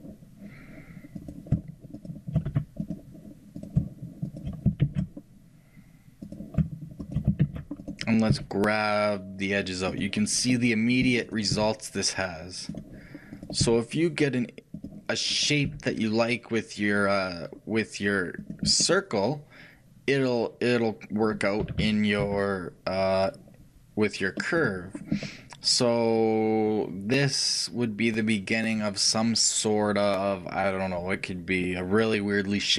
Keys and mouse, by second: 1.5-10.4 shift+right drag, 4.9 shift+r, 7.5 shift+r, 8.4 g, 10.4-11.6 shift+middle drag, 11.6-15.7 drag, 11.6 g, 15.7-18.9 right drag, 15.7 g, 18.9-21.7 middle drag, 21.7 a, 21.9 a, 22.3 s, 25.0-32.7 middle drag.